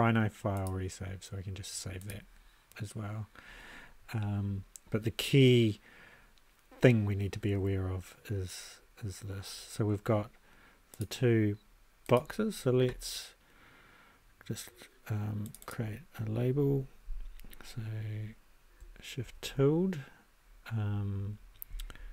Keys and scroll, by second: 19.2 shift+`.